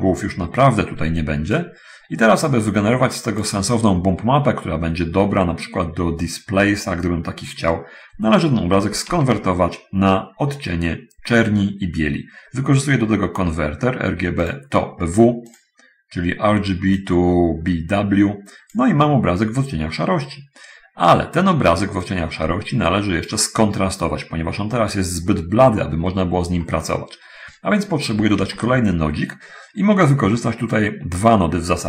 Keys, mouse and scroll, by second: 1.8-3.4 drag, 9.4 shift+a, 14.7 click, 15.4 click, 17.0-19.2 drag, 22.3-23.7 drag, 26.8-28.3 middle drag, 28.6 shift+a.